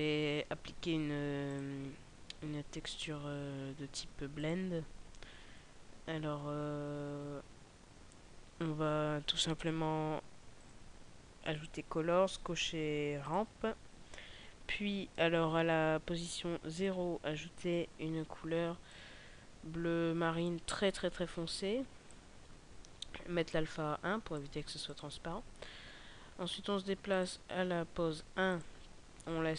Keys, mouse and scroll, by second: 5.8-7.1 scroll down 2, 8.5 scroll down 4, 9.2 scroll up 1, 10.5 click, 16.6 click, 27.0 click.